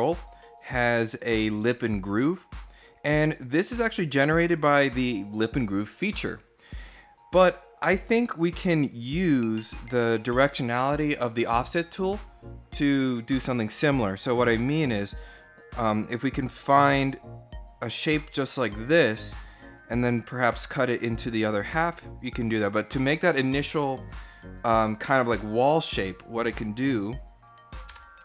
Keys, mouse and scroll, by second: 0.7 click, 1.2 scroll down 1, 1.7-2.7 middle drag, 8.9 click, 16.5-17.0 scroll down 4, 22.0 click, 25.6-26.1 scroll up 3, 26.1 middle click, 27.7 Tab.